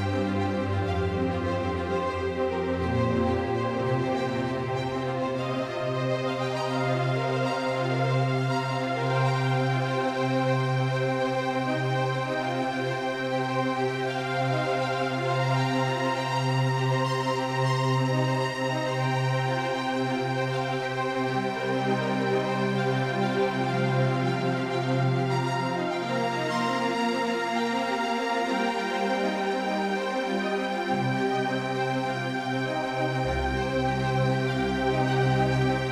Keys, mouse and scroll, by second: 0.0 Tab, 2.1 c, 11.0 s.